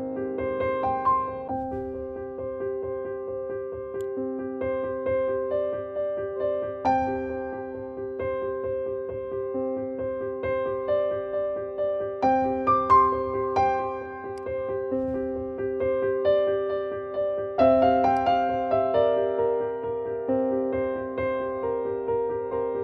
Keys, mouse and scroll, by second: 1.5-2.1 typing, 3.9-8.8 drag, 8.8-11.9 scroll down 1, 14.2 click, 18.0 click.